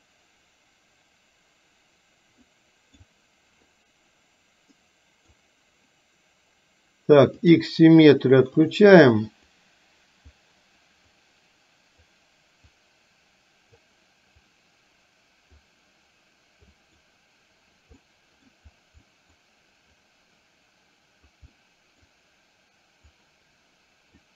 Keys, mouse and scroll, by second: 4.9 middle click, 7.4 click, 8.7-9.7 drag, 11.2-12.2 drag, 12.7-13.9 drag, 14.5-15.8 drag, 16.8 click, 18.0 middle click, 19.2 middle click, 20.0-21.4 drag, 21.5 middle click, 23.2-24.3 drag.